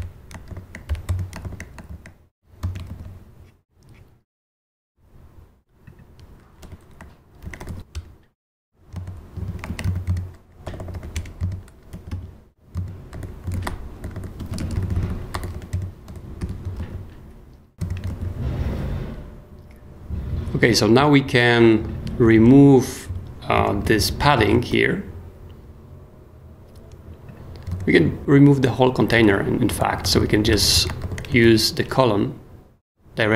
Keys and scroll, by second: 0.0-1.9 typing, 1.4 shift+super+j, 2.6 shift+super+;, 2.9 shift+super+s, 6.6-8.2 typing, 8.7 Return, 9.3 super+l, 9.4-10.9 typing, 10.6 super+h, 11.1 Return, 11.9 super+l, 12.1-16.4 typing, 12.7 super+x, 12.8 super+Escape, 16.0 super+p, 16.8 super+s, 17.7 ,, 18.1 super+s, 23.1 super+d, 23.8 super+k, 24.2 d, 24.7 super+s, 28.0 super+b, 28.2-31.0 typing, 31.4 shift+super+s, 32.2 super+s.